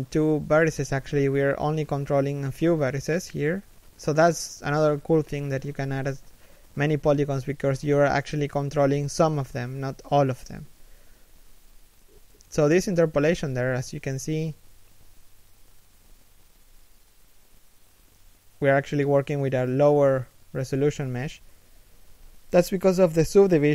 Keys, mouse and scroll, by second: 0.6 z, 0.7 middle click, 1.1 z, 2.5 KP_1, 3.1 scroll down 1, 3.4 shift+middle click, 3.8 scroll down 1, 4.1 middle click, 4.5 1, 5.4 scroll down 1, 5.6-6.2 scroll up 1, 11.2 scroll up 1, 11.6 shift+middle click, 12.7 scroll up 1, 13.5 shift+middle click, 13.9 scroll up 1, 14.2 right click, 15.0 shift+right click, 15.1 g, 17.1 middle click, 18.1 Tab, 18.3 z, 18.5 shift+middle click, 18.7 z, 19.0 right click, 19.3 middle click, 20.6 z, 20.7 scroll up 1, 21.0 z, 21.4 middle click, 22.7 scroll up 1.